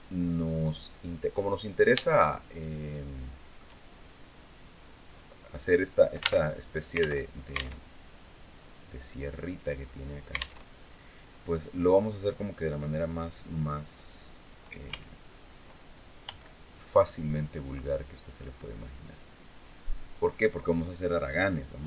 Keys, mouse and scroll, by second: 1.7-3.5 shift+middle drag, 3.8 shift+scroll down 3, 6.1 alt+Tab, 6.9 alt+Tab, 7.9 click, 8.6 click, 10.4 alt+Tab, 14.6 a, 16.0 b, 16.6-20.1 drag, 21.7 x.